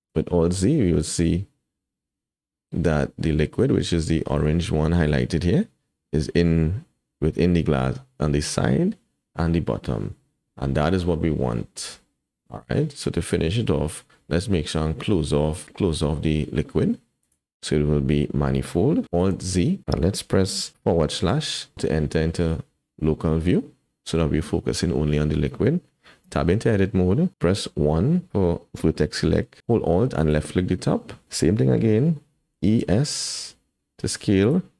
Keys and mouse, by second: 0.2 alt+z, 12.1-12.6 drag, 12.6-13.0 middle drag, 13.4 shift+middle drag, 17.2 click, 19.3 alt+z, 21.2 /, 26.2 Tab, 27.6 1, 30.1 alt+click, 32.6 e.